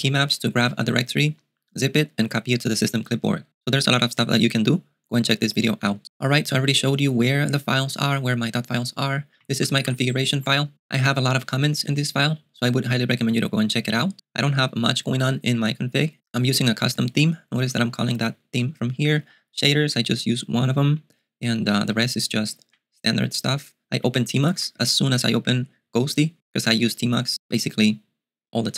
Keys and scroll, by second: 9.6 ctrl+u, 9.7 ctrl+u, 9.9 ctrl+u, 10.0 ctrl+u, 10.1 ctrl+u, 18.1 ctrl+d, 18.4 ctrl+d, 19.3 ctrl+d, 19.4 ctrl+d, 20.6 ctrl+d, 20.8 ctrl+d, 20.9 ctrl+d, 21.7 ctrl+d, 22.7 ctrl+u, 24.0 ctrl+u, 24.5 j, 24.6 j, 24.8 j, 26.1 typing.